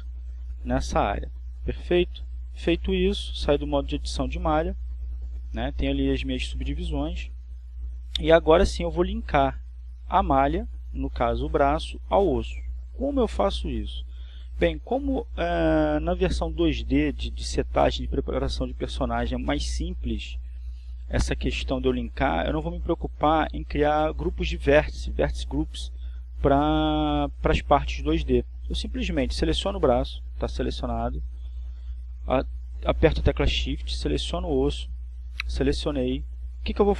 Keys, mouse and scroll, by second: 8.0 Tab, 12.8-13.3 scroll down 2.